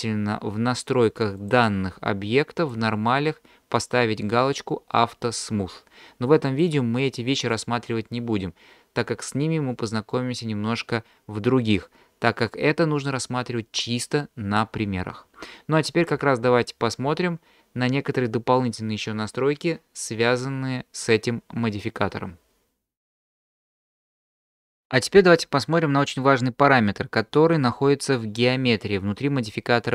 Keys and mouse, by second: 1.4 click, 2.6 click, 5.3 click, 6.5 click, 7.5 click.